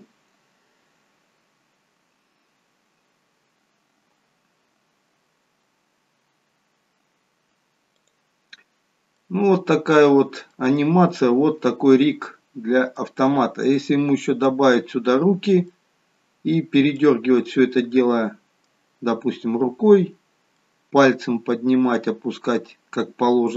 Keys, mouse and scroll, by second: 8.0 click, 8.7-9.1 scroll down 2, 9.1 middle click, 10.7-11.3 scroll up 3, 11.1 middle click, 13.5 scroll down 2, 13.7 middle click, 17.3-18.2 scroll up 3, 17.7 middle click.